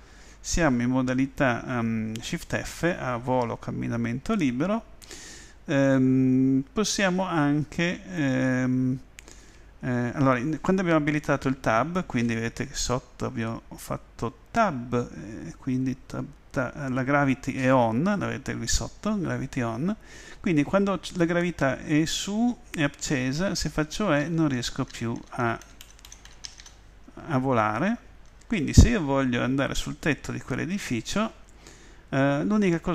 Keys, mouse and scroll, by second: 24.2 e, 28.0 e.